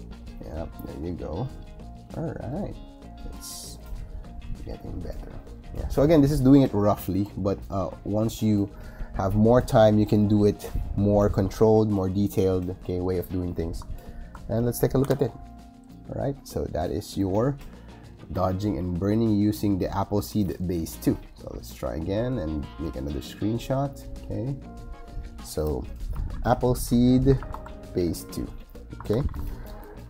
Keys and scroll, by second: 14.9 shift+super+g, 26.2 shift+a, 27.2 shift+s, 28.3-29.5 typing.